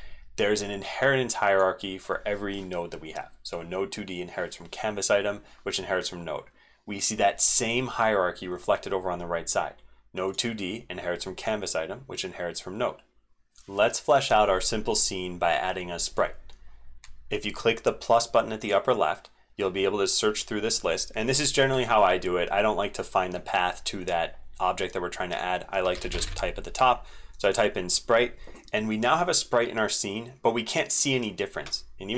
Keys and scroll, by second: 13.3 ctrl+z.